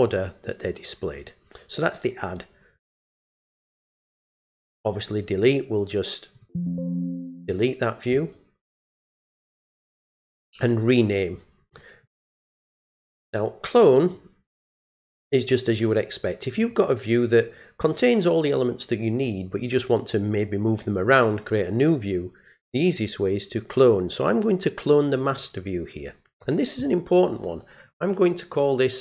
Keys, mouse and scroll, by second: 3.5 click, 6.3 click, 7.5 click, 12.0 click, 14.0 click, 16.5 click, 25.3 click.